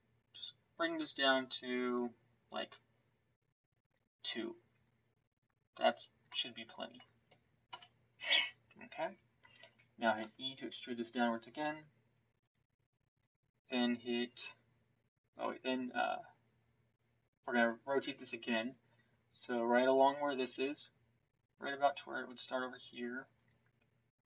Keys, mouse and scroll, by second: 6.2 middle click, 7.6 KP_1, 10.1 e.